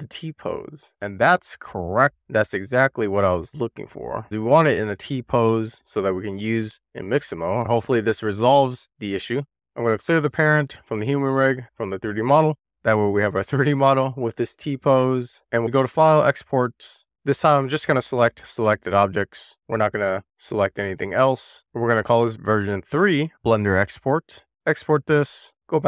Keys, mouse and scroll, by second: 9.6 alt+p, 13.9 click, 15.3 shift+middle click, 15.7-17.0 drag.